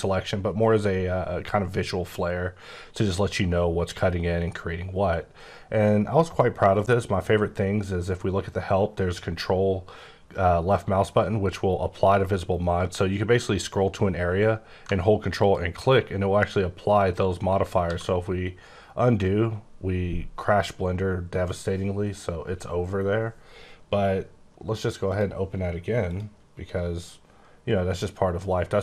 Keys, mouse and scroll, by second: 0.2-1.3 scroll up 4, 1.3-2.3 scroll down 9, 2.3-4.1 scroll up 10, 4.1-4.5 scroll up 1, 4.5-5.4 scroll down 7, 5.5-6.6 scroll up 5, 6.6 scroll down 3, 12.6 scroll down 9, 13.1 scroll up 3, 13.6-14.9 scroll down 1, 14.9-15.4 ctrl+scroll down 3, 15.4 ctrl+click, 17.8 ctrl+z, 26.1 click.